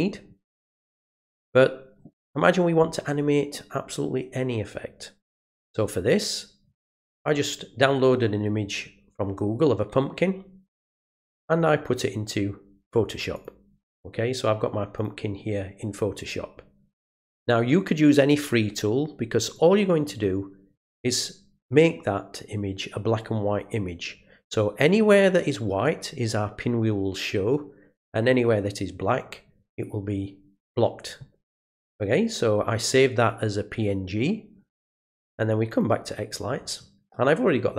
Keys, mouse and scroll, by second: 6.1 click, 13.3 click, 14.9 click, 19.5 click, 35.7 click.